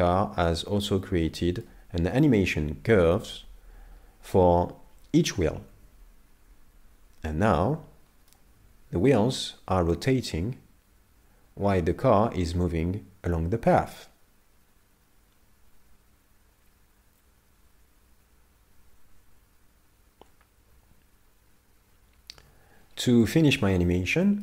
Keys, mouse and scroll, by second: 0.4-1.1 scroll down 8, 0.9 middle click, 7.6 middle click, 22.8-23.4 scroll down 5, 23.2 middle click, 23.8-24.3 scroll down 2, 24.3 shift+middle click.